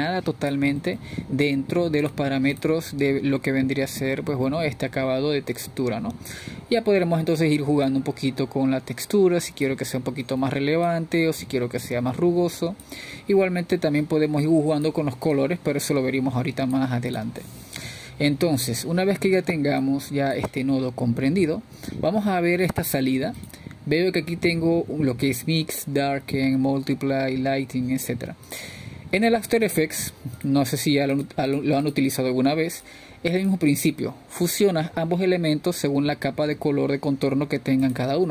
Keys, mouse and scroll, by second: 4.1-6.1 middle drag, 6.1-8.3 drag, 8.9-11.3 middle drag, 11.3-34.5 drag, 34.8-37.3 drag.